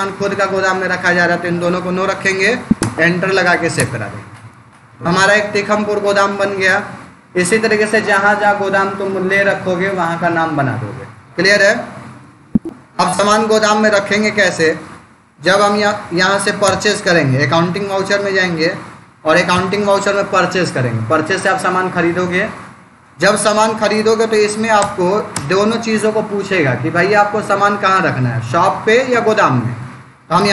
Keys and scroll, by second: 2.6 Return, 12.5 Escape, 15.7 Down, 16.5 Return, 19.4 F9, 24.6 Return, 30.2 Down.